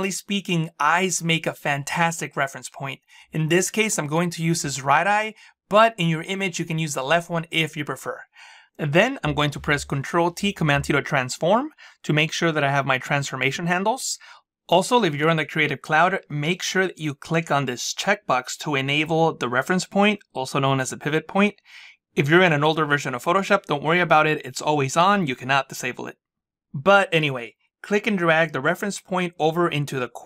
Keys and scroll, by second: 9.9 ctrl+t.